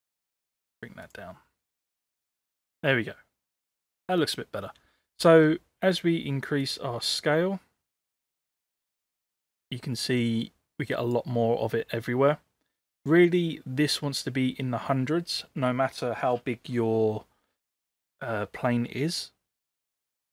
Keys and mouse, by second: 2.9-4.2 middle drag, 6.6-11.1 drag, 19.8-20.3 drag.